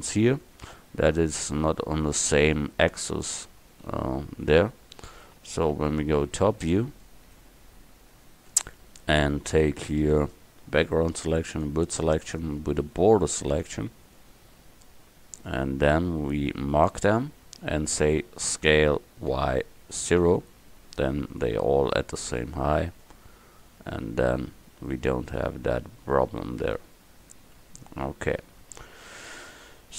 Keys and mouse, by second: 2.3 Tab, 3.5 a, 3.9 a, 5.4 KP_7, 11.6-13.6 drag, 12.2 a, 13.6 b, 18.7 s, 22.4 Tab.